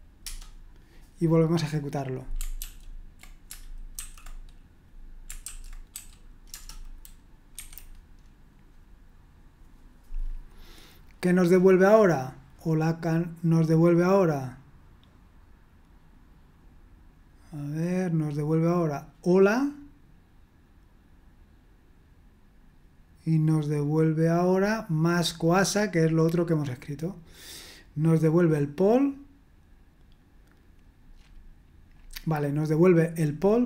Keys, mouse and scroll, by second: 0.0-0.2 typing, 1.6 click, 2.6 ctrl+p, 4.0 typing, 5.7-7.5 typing, 7.5 F5, 25.3-31.2 drag, 31.2-32.0 scroll up 1, 32.0-33.3 scroll up 1, 33.3-33.6 scroll up 1.